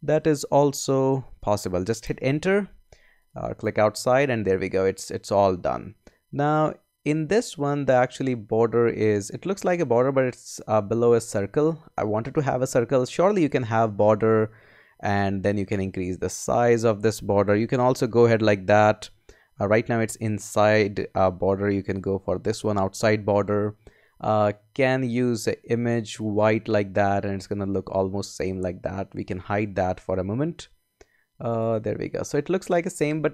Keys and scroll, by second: 0.0 shift+Left, 2.2 Return, 17.5 Up, 19.3 Up.